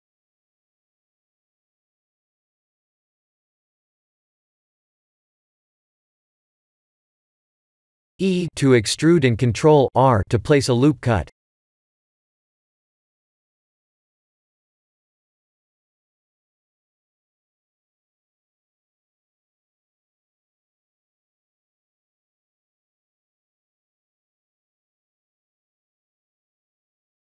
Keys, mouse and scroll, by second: 0.4 g, 3.1 s, 5.3 middle click, 9.0 Tab, 9.9 e, 16.5 ctrl+r, 21.6 3, 22.5 ctrl+r, 24.1 3, 24.3 click, 25.1 e.